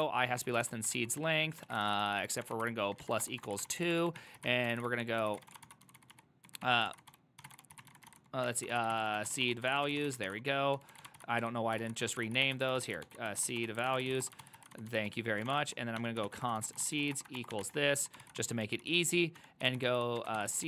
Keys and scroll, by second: 0.0-20.6 typing, 3.8 ctrl+c, 12.3 ctrl+c.